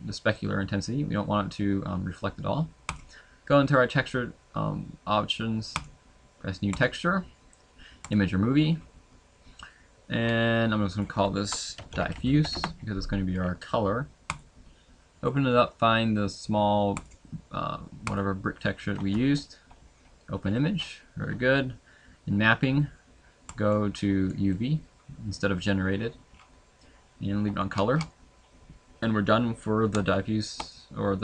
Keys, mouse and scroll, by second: 5.9 click, 8.1 click, 12.5 click, 19.7 click, 29.0 middle click, 29.0 scroll down 10, 30.1 shift+middle click, 30.7 middle click.